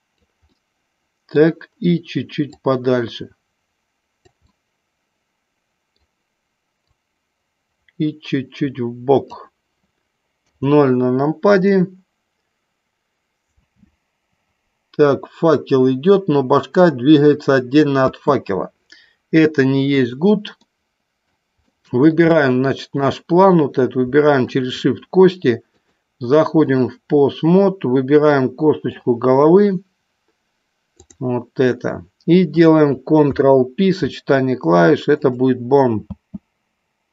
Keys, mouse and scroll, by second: 0.6-1.5 middle drag, 2.6-4.3 drag, 4.5-6.1 middle drag, 6.8-9.5 drag, 10.5 KP_0, 13.7 space, 18.1 space, 20.1 click, 20.7-21.3 middle drag, 21.7-22.2 shift+middle drag, 22.3-23.1 middle drag, 24.5 shift+click, 25.8-27.0 drag, 28.3 middle click, 30.8 click, 33.2 ctrl+p, 36.2 space.